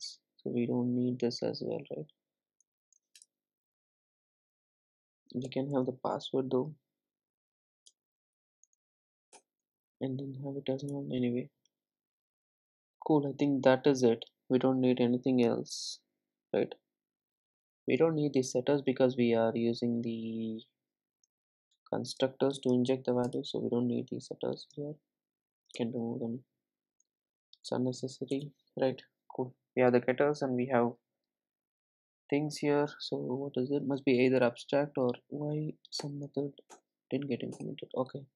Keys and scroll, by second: 5.6 super+n, 36.1 alt+Return.